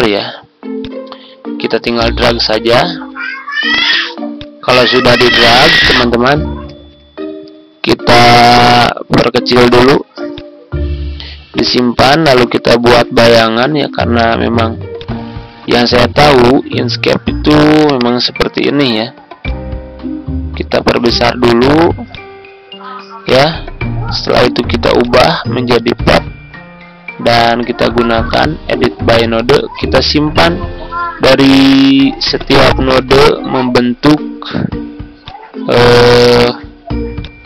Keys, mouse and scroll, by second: 0.7-9.8 drag, 10.3-20.5 drag, 21.4-26.9 drag, 27.1-28.1 ctrl+scroll up 1, 28.1-37.4 drag.